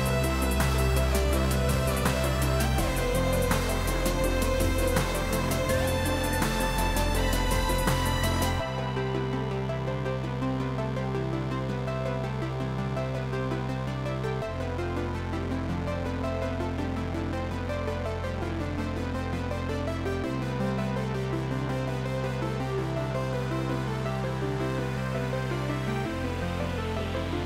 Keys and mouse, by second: 4.0 click, 6.5 x, 7.3 BackSpace, 7.5 1, 7.9 Return, 8.7 x, 9.1 Return, 9.6 x, 9.8 Return, 10.7 click, 11.7 Escape, 11.8 click, 12.1 Delete, 18.8 click, 19.5 r, 19.8 Right, 20.1 Left, 20.8 click, 26.7 click, 27.2 click.